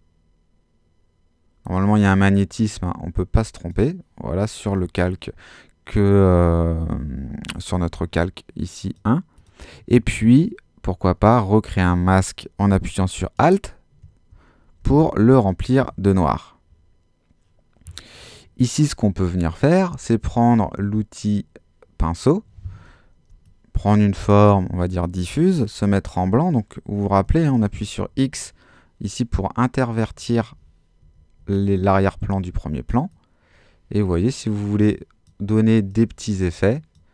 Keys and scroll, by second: 14.8 alt+super+z, 27.3 x, 30.1 x.